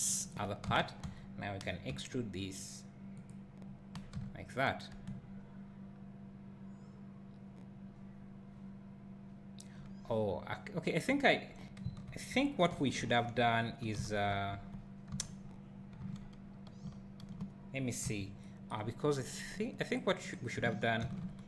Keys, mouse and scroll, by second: 0.3 click, 0.6 Tab, 1.0 a, 1.9 e, 3.2 click, 4.1 Tab, 5.1 `, 14.0 ctrl+z, 15.1 Tab, 15.5 scroll down 1, 18.1 KP_7, 18.9 scroll down 1, 20.0 click, 21.1 shift+d.